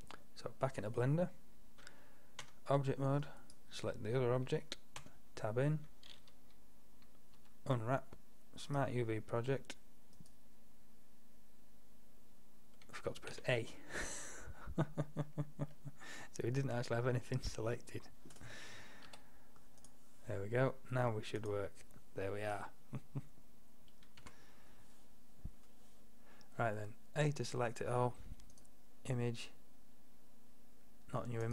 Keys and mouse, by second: 2.5 Tab, 5.1 Tab, 7.4 u, 13.4 a, 15.8 middle drag, 17.0 middle drag, 17.4 middle click, 19.2 u, 24.3 a, 28.6-30.4 drag.